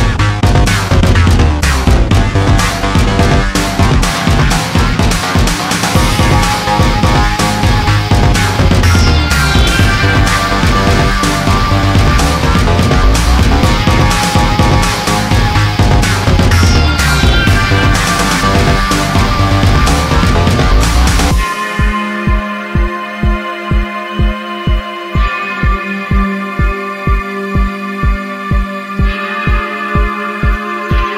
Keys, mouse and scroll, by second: 0.1 click, 1.7 click, 2.5 click, 4.2 click, 4.2 middle click, 4.6 middle click, 5.1-5.5 scroll down 1, 6.5 click, 7.0 click, 8.2 click, 8.9 click, 9.5 click, 11.0 ctrl+z, 13.1 click, 13.6 click, 14.3 ctrl+z, 15.5 alt+click, 17.8 click, 18.4 click, 19.3 click, 20.7 click, 21.4 click, 22.6 click, 23.7 click, 25.0 click, 25.9 click, 27.3 click, 28.0 click, 29.0 click, 29.3 click, 30.7 click.